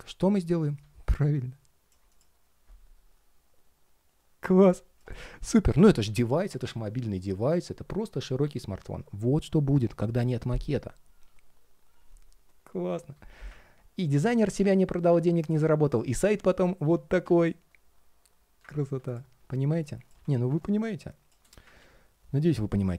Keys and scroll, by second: 16.0 super+z, 21.5 super+z.